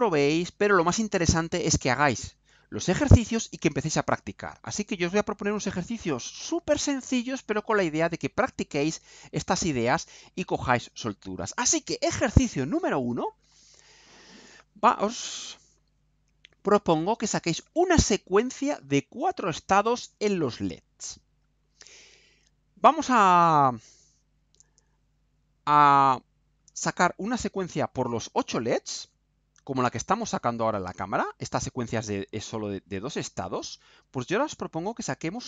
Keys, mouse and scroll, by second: 0.7 scroll up 2, 11.2 scroll down 2, 31.4 click.